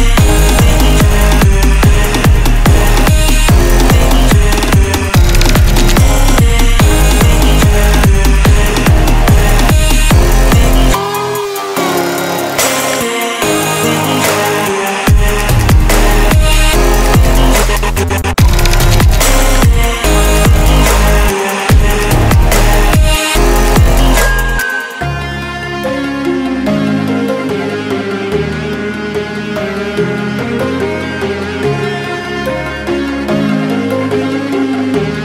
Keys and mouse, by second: 1.1-2.3 drag, 2.7-4.6 drag, 4.9 click, 10.9 Return, 12.3 click, 13.7 ctrl+d, 14.7-25.3 drag, 27.1 Delete, 27.5 ctrl+d, 28.7 click, 30.5 ctrl+t, 31.7-35.2 drag.